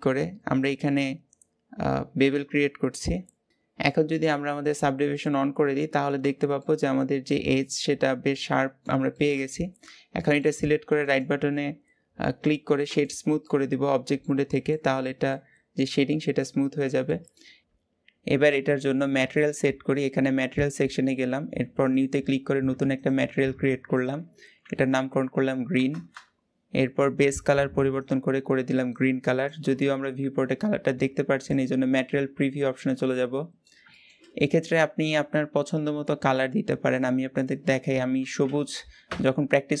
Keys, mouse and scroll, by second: 5.0 click, 5.7 scroll down 1, 6.0 Tab, 6.4-10.8 middle drag, 10.8-13.3 right drag, 13.3-14.7 middle drag, 14.7-15.1 scroll down 5, 15.1-16.3 middle drag, 16.3-16.9 scroll up 4, 16.9-17.4 middle drag, 17.4 scroll up 2, 21.7-25.7 drag, 25.7 e, 27.9 click, 31.3 click, 32.3-32.7 scroll up 1, 32.7-39.8 middle drag.